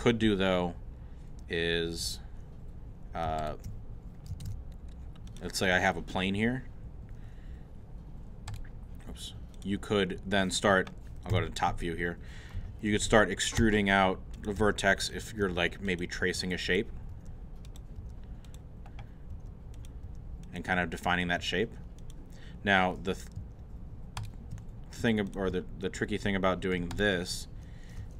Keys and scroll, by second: 4.4 shift+a, 11.3 7, 13.6 e, 19.3 e, 21.4 e.